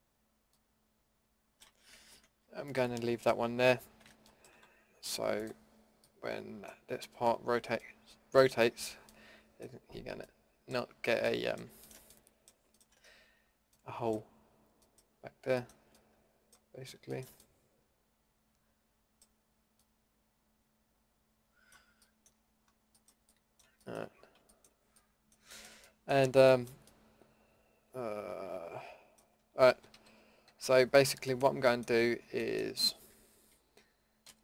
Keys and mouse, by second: 2.1 ctrl+z, 3.7-4.5 middle drag, 4.5 Delete, 14.1-14.9 middle drag, 16.1-17.1 middle drag, 19.8-20.8 middle drag, 21.8-23.4 middle drag, 29.7 KP_1, 30.1 KP_5, 30.5 KP_5, 34.2 l.